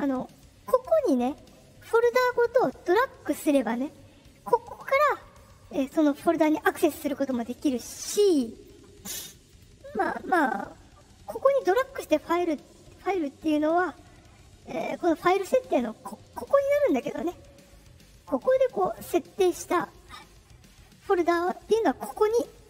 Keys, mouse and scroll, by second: 0.2 click, 5.5 click, 6.0 click, 6.5 click, 6.9 click, 9.4 click, 15.1 click, 18.6 click.